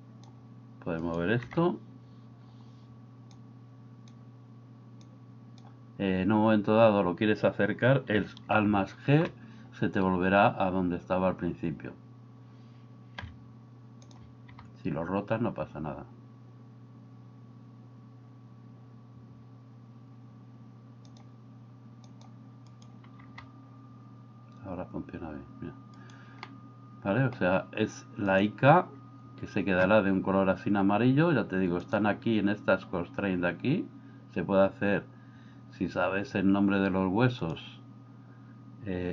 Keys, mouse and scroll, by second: 1.5 g, 3.4 click, 5.1 click, 8.6 alt+g, 9.1 alt+g, 9.3 alt+g, 13.2 r, 14.5 g, 22.1 click, 23.2 g, 26.5-27.4 middle drag.